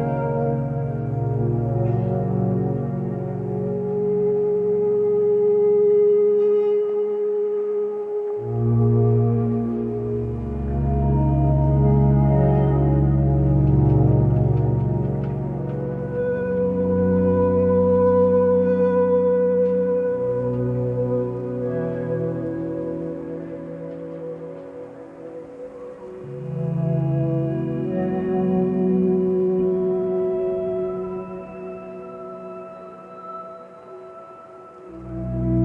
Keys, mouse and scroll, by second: 3.9 ctrl+z, 4.7 ctrl+shift+z, 5.7 ctrl+space, 9.0 ctrl+space, 9.8 ctrl+space, 11.5 ctrl+0, 12.3 ctrl+-, 13.3 ctrl+;, 30.1 b, 31.2 ctrl+space.